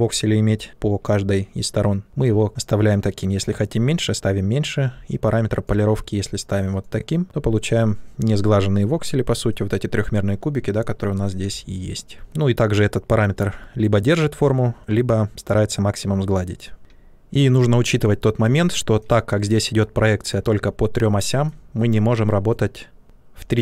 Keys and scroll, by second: 11.3 shift+f.